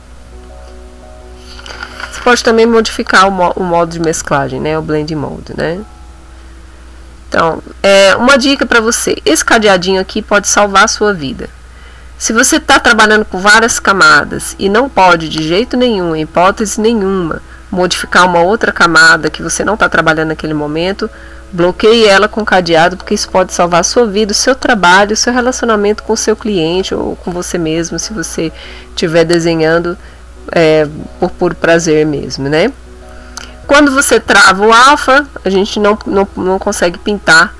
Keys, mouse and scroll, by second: 9.2 click, 9.6 click, 14.1 click, 14.6 click, 15.0 click, 16.0 click, 34.1 click, 37.4 click.